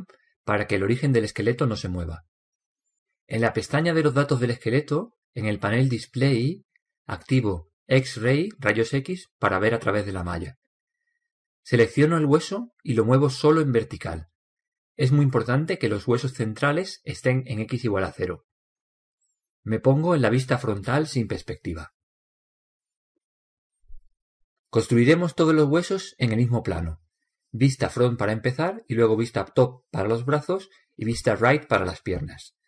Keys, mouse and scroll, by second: 5.0-8.1 drag, 9.7-11.6 drag, 13.1-15.0 right drag, 14.4-16.2 drag, 21.0 KP_1, 22.3-23.3 scroll up 1, 23.3-25.1 middle drag, 26.3 click.